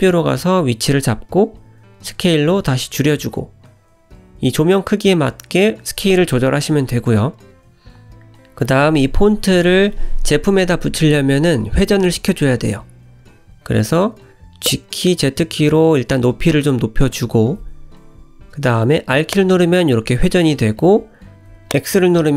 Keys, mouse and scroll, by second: 1.0 s, 1.8-2.3 scroll up 7, 2.4 shift+middle click, 3.0 g, 3.8 s, 4.4 g, 5.7-6.1 scroll up 3, 6.1 shift+middle click, 6.6 s, 7.9 g, 9.4-10.7 scroll down 2, 10.7 middle click, 12.1-12.7 scroll up 4, 13.2 g, 15.3 middle click, 17.9 r.